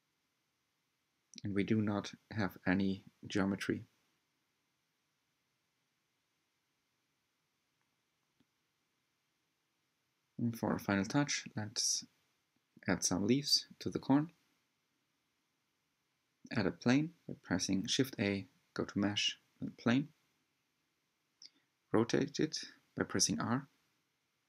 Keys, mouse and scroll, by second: 2.2 scroll down 4, 2.6-5.1 middle drag, 5.1-5.7 scroll up 2, 8.1-8.4 drag, 8.6-8.9 scroll down 1, 9.1 Tab, 9.7-11.8 drag, 12.2 g, 14.1 click, 14.6 scroll up 2, 15.0 scroll down 2, 15.3-16.1 middle drag, 16.1 shift+a, 20.4 r, 22.7 Left, 23.5 g.